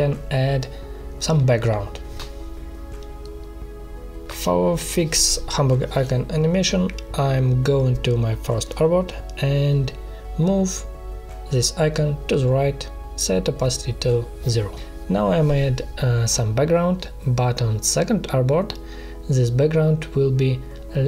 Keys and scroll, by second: 9.3 ctrl+z, 13.9 space, 15.8 ctrl+shift+[, 18.8 space, 19.4 ctrl+c, 19.5 space, 19.9 ctrl+v.